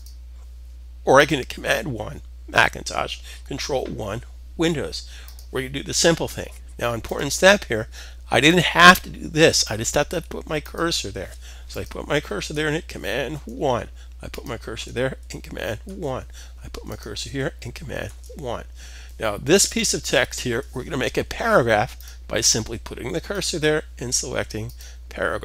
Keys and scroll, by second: 12.8 super+1, 15.4 super+1, 17.6 super+1.